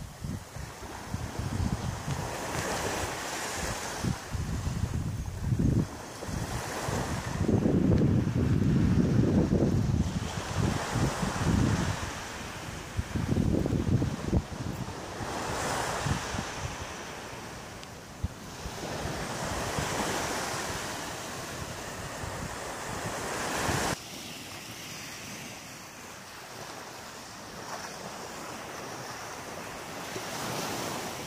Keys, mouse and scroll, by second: 0.0 shift+right click, 0.3 shift+middle click, 1.4 shift+right click, 3.0 shift+right click, 4.1 shift+right click, 5.2 KP_3, 16.4 g, 18.4 click, 26.0-26.4 scroll up 2, 26.6 middle click, 30.8 click.